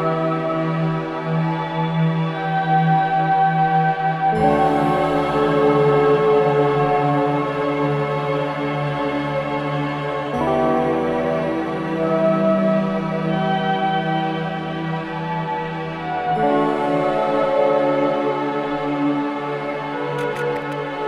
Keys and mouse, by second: 0.4-1.6 drag, 1.7 click, 3.0-3.3 typing, 4.1-7.0 drag, 7.0 typing, 8.4 click, 9.2-9.7 typing, 10.6 click, 11.3 alt+click, 12.2-13.0 alt+drag, 13.4 click, 14.9-15.3 typing, 16.5 click, 18.0-21.0 drag.